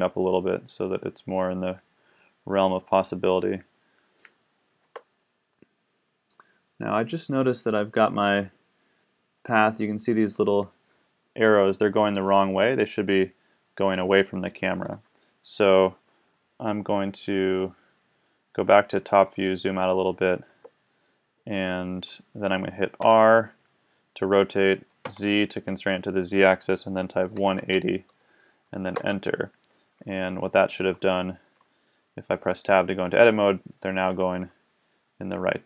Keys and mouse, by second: 0.2-2.2 drag, 3.7-4.6 middle drag, 4.8 Tab, 9.0-10.2 middle drag, 14.0 middle click, 15.0-16.9 middle drag, 16.9 KP_7, 20.5 Tab, 23.0 r, 31.1-32.7 middle drag, 32.7 Tab.